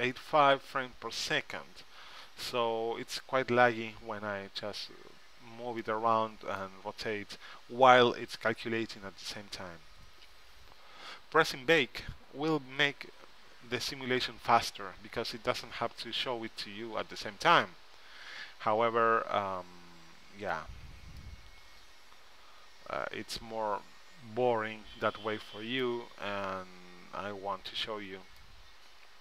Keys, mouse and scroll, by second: 7.2-8.4 middle drag, 22.5-23.7 middle drag, 27.3-28.4 middle drag.